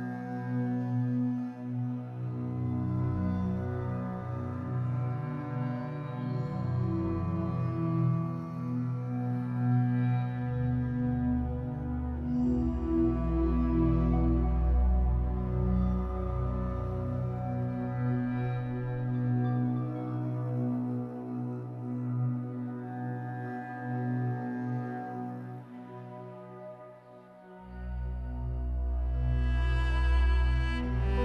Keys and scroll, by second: 3.8 4, 5.0 3, 5.8 shift+Tab, 9.2 alt+Caps_Lock, 10.3 Caps_Lock, 11.0 2, 12.2 r, 14.9 Escape, 15.2 3, 15.9 shift+Tab, 17.7 3, 19.0 shift+w, 21.5 2, 21.8 Return, 26.1 l, 27.0 shift+w, 27.6 Escape, 30.9 l.